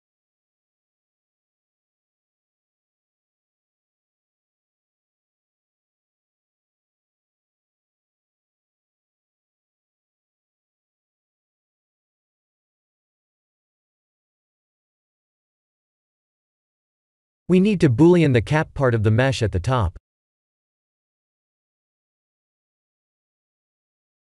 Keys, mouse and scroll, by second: 0.5 ctrl+z, 1.0 ctrl+z, 1.7 ctrl+z, 2.7 ctrl+z, 3.4 ctrl+z, 3.6 ctrl+z, 10.6 click, 11.0-12.6 alt+middle drag, 12.9 click, 13.6 KP_1, 15.2 right drag, 22.1 shift+a.